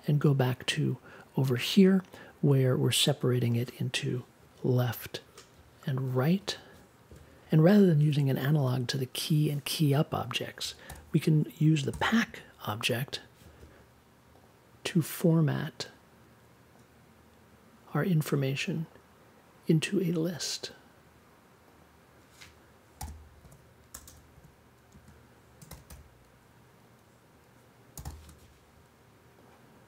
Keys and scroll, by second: 7.5 BackSpace, 10.8 n, 11.9 p, 12.2 a, 22.9-26.3 typing, 27.9 shift+d.